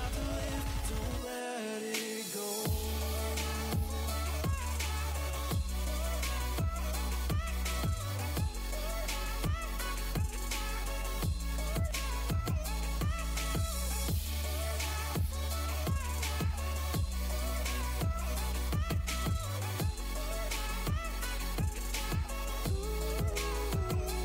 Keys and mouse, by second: 4.1-10.1 drag, 11.3 click, 12.3-13.3 middle drag, 13.3-14.8 drag, 14.8 right click, 15.1 click, 15.2 right click, 15.2 middle click, 15.6-16.8 drag, 16.8-19.6 right drag, 19.6 middle click, 19.8-21.7 drag, 21.7-24.2 middle drag.